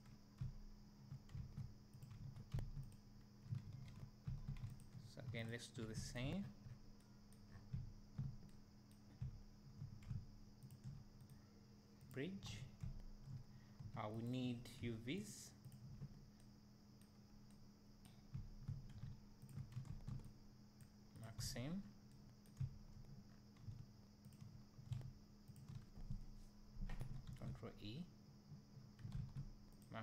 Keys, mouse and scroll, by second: 0.5 `, 1.4 2, 2.0 click, 2.6 1, 2.9 click, 4.3 2, 4.8 alt+click, 6.2 shift+click, 6.4-6.8 scroll down 2, 7.5 scroll up 2, 7.8 `, 9.2 `, 10.7 shift+click, 12.5 alt+a, 12.5-14.3 right drag, 12.8 `, 14.3 alt+click, 15.3 alt+shift+click, 18.4 `, 19.5 shift+click, 21.2 ctrl+e, 21.4 alt+a, 21.8 scroll down 1, 22.6 `, 23.3 scroll up 1, 24.3 alt+click, 25.5 alt+shift+click, 25.8 scroll up 1, 29.8 ctrl+e.